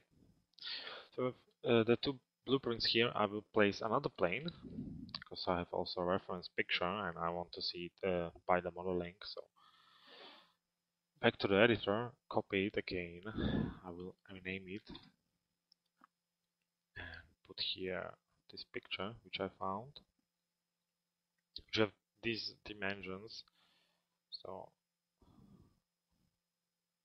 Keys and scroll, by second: 9.3 m, 14.6 Return.